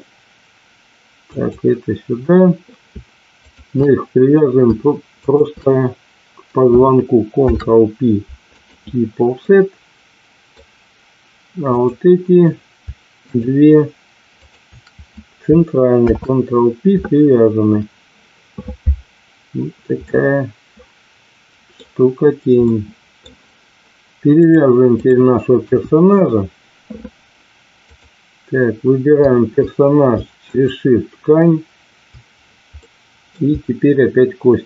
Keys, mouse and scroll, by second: 1.3 click, 3.4 shift+click, 5.3 shift+click, 7.4 ctrl+p, 9.4-10.5 middle drag, 11.8 click, 13.3 shift+click, 14.3 shift+click, 15.9 ctrl+p, 20.0-21.7 middle drag, 22.7 middle click, 24.3 click, 25.6 KP_1, 27.9 click, 32.8 middle click.